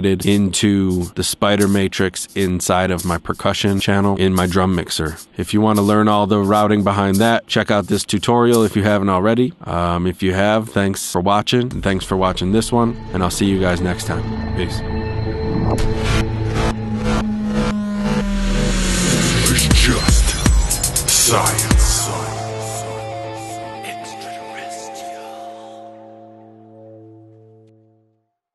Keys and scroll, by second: 9.1 space.